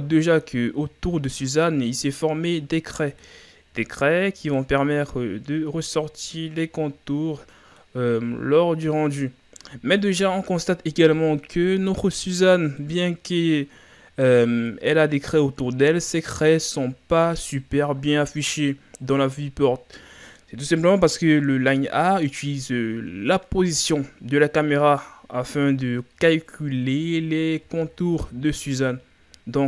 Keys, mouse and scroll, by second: 0.7-1.3 ctrl+scroll up 3, 2.0-8.1 middle drag, 8.3-8.9 scroll down 2, 9.0-18.2 middle drag, 19.0 scroll down 3, 19.3-29.6 middle drag.